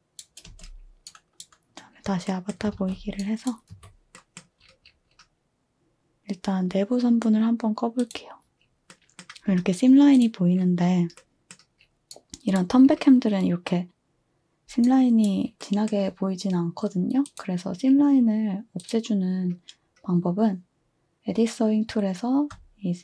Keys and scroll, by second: 0.5 space, 2.7 a, 3.7 a.